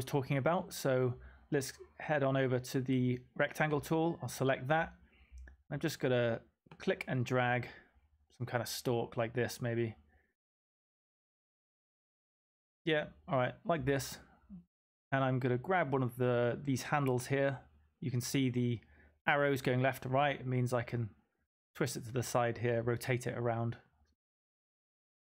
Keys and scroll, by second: 20.2 m.